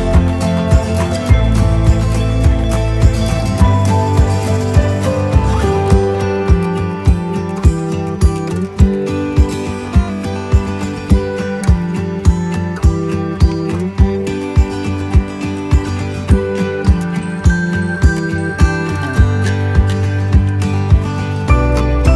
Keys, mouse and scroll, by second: 1.8 click, 2.8 right click, 3.4-4.4 scroll up 1, 4.4 right click, 19.8-21.2 drag.